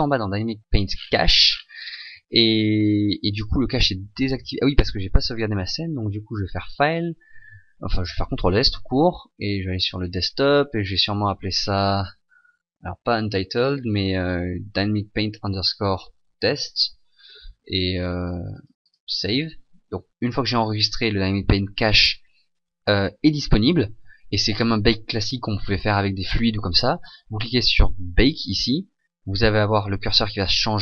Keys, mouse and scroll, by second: 19.0 click.